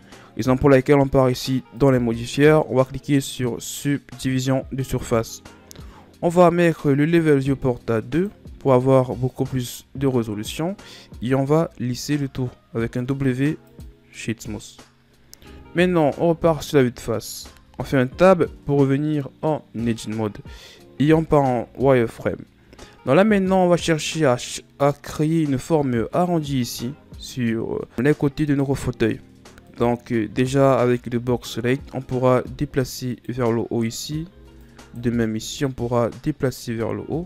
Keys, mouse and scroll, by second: 1.8-4.9 drag, 8.1-9.9 drag, 9.9-11.3 scroll up 2, 11.3 w, 15.9 KP_1, 17.6 Tab, 21.1 z, 22.3-23.8 scroll up 2, 23.8-24.6 scroll up 2, 24.6 scroll up 2, 29.7 right click, 30.3 b, 32.3-33.9 drag, 33.9 right click, 34.3 b, 35.7-37.2 drag.